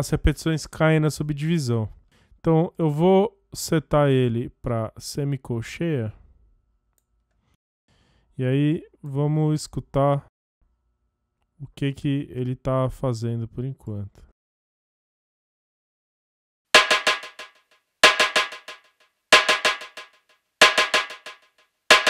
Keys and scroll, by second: 16.0 space.